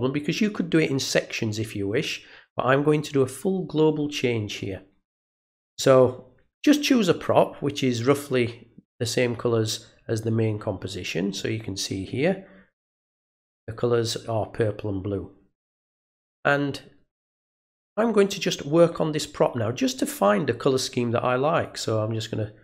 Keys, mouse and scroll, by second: 18.2 click, 21.6-22.6 drag.